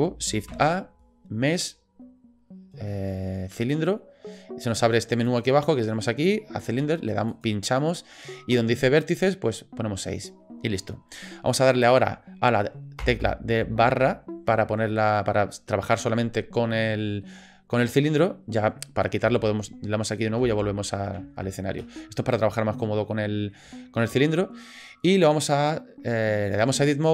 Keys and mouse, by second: 0.5 shift+a, 5.3 click, 7.3 click, 14.9 drag, 17.0 shift+drag, 23.1-23.5 drag, 23.7-24.0 shift+drag, 25.5-26.5 drag.